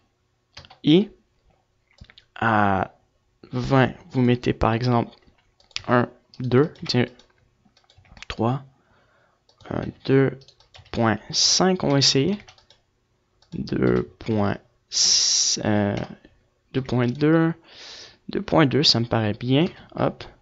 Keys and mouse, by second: 0.3-1.6 drag, 3.8-18.3 drag, 19.1 |.